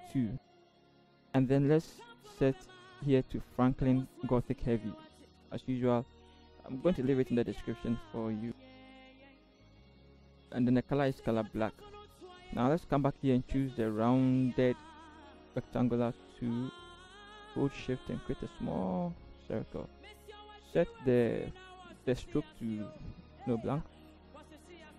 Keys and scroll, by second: 0.6 typing, 7.6 v, 8.2 v, 8.7 ctrl+t, 9.1 shift+Right, 9.2-9.7 shift+Up, 10.1 Return, 24.0 v, 24.5 ctrl+=, 24.9 Right.